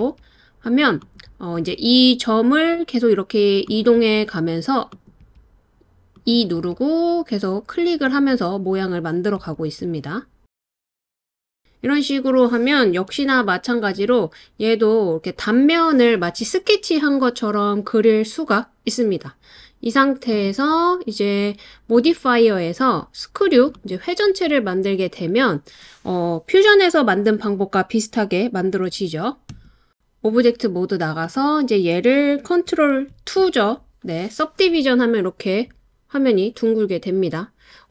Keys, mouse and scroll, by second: 1.0 click, 1.6 e, 3.7 click, 4.0 e, 4.9 click, 5.9 click, 5.9 e, 6.0 e, 6.6 click, 7.1-10.2 typing, 7.6 click, 7.9 click, 8.4 click, 8.9 click, 9.2 click, 11.2 click, 13.9 s, 22.0-24.0 drag, 29.5 Tab, 33.1 super+2.